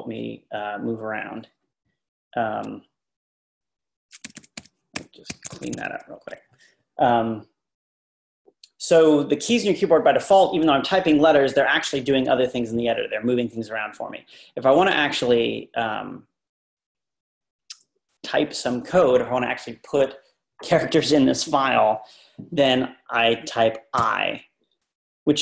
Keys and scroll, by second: 4.3-5.7 typing, 24.0 i.